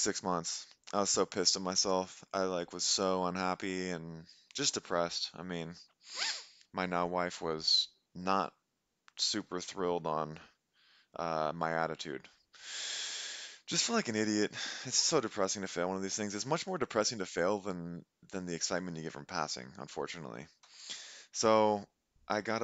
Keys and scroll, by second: 20.7 Delete, 21.0 Right.